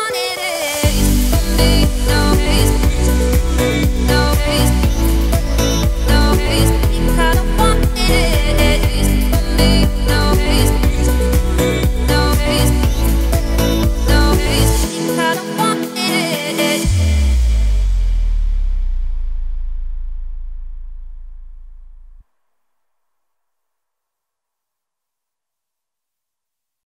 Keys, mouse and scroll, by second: 3.9 Tab, 6.1 click, 7.0 click, 7.9-9.1 drag, 9.1 ctrl+z, 9.4 ctrl+z, 9.7 ctrl+z, 10.0 ctrl+z, 10.9 Tab, 11.9-12.3 scroll down 5, 12.3 click, 12.7-15.8 shift+middle drag, 16.1-17.0 scroll up 1, 17.0 scroll up 1, 17.0-18.0 middle drag, 18.0 `, 19.0 click, 19.5 Tab, 19.9 `, 20.9-21.7 scroll down 14, 21.7 3, 22.0 click, 22.3 middle click, 23.6-25.1 middle drag, 25.1 click, 25.7 shift+click, 26.1 shift+click, 26.5 x.